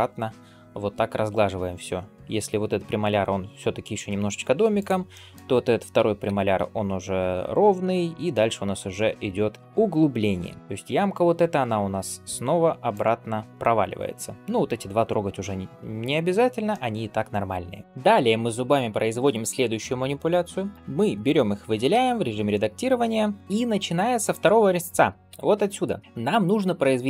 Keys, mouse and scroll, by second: 4.6 click, 5.0 middle click, 5.8 g, 7.9 shift+middle click, 8.5 scroll down 2, 8.8 middle click, 9.1-9.6 scroll up 1, 9.6 click, 10.0 g, 13.8-16.6 scroll down 1, 16.6 middle click, 17.6 scroll down 1, 17.8 click, 20.5 click, 21.7 Tab, 23.4 middle click, 24.1 click, 25.1 l, 26.0 middle click.